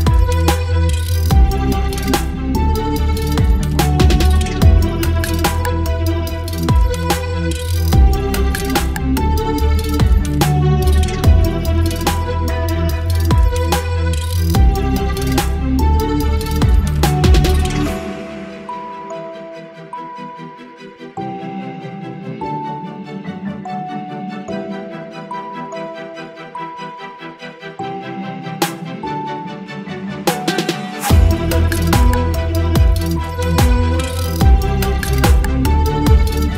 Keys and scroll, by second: 0.3 v, 0.8 space, 2.5 ctrl+BackSpace, 3.6 v, 5.0 Delete, 5.2 space, 6.0 v, 6.8 ctrl+t, 7.8 Return, 8.0 Down, 8.1 Down, 8.1 Down, 9.0 space, 10.0 space, 11.8 v, 13.1 Return, 13.2 space, 14.1 space, 15.3 space, 16.9 v, 17.0 Up, 17.1 Up, 17.1 Up, 17.1 Up, 17.2 Left, 17.3 Left, 17.3 Left, 17.4 Left, 17.8 Left, 17.8 Left, 17.9 Left, 17.9-18.6 typing, 18.2 Left, 22.2 space, 23.5 space, 24.2 space, 28.5 ctrl+BackSpace, 28.8 ctrl+d, 29.0 space, 30.3 ctrl+BackSpace, 30.6 space, 31.5 ctrl+BackSpace, 31.9 space, 33.2 Delete, 33.3 space, 34.6 space, 36.2 ctrl+BackSpace, 36.4 space.